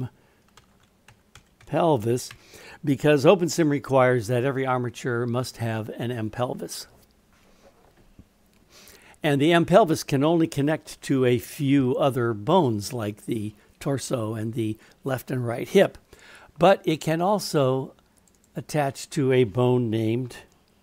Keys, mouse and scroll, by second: 18.2 click, 18.4-20.8 drag.